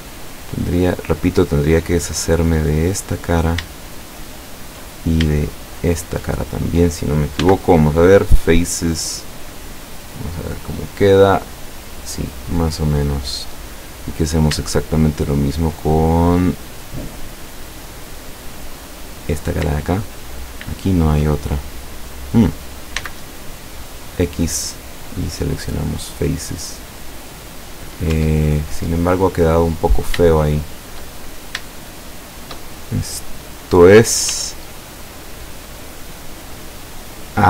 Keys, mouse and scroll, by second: 0.4 right click, 0.9 right click, 1.8 click, 2.6 right click, 3.0-3.8 middle drag, 3.9-4.9 shift+middle drag, 5.8 shift+right click, 7.4 x, 8.1 click, 8.7-9.7 middle drag, 9.8 scroll down 1, 10.2-11.3 middle drag, 11.7 middle click, 12.5 scroll up 1, 13.1-13.8 middle drag, 14.3 scroll up 2, 14.7-16.0 shift+middle drag, 16.5 scroll down 2, 17.3-18.5 middle drag, 19.2 right click, 20.1 shift+right click, 20.9 shift+right click, 21.4 shift+scroll down 2, 22.2 middle click, 23.0 x, 24.3 click, 25.0-28.3 middle drag, 28.2 Tab, 28.8-29.8 middle drag, 30.3-31.2 shift+middle drag, 31.5 scroll up 3, 31.8-32.8 shift+middle drag, 33.1-34.1 middle drag, 34.3 Tab, 35.4 right click, 36.2 right click, 36.6 right click, 36.9 right click, 37.3-37.4 middle drag.